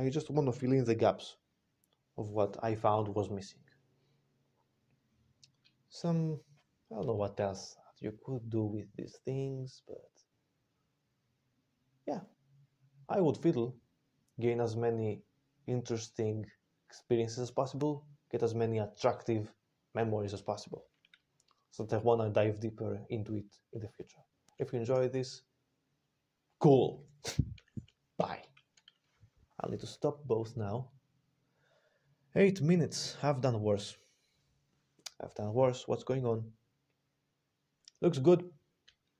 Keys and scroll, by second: 28.0 super+3.